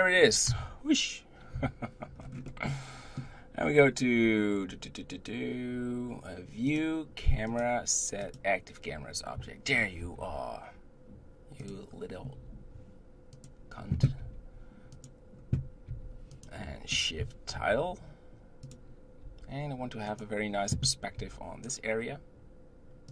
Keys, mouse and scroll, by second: 0.5 KP_0, 1.5 KP_7, 2.2 scroll down 4, 2.5-5.5 middle drag, 6.7-9.7 drag, 10.0 shift+`, 12.3 g, 14.2 g, 15.9 g, 19.2 g, 21.2 g.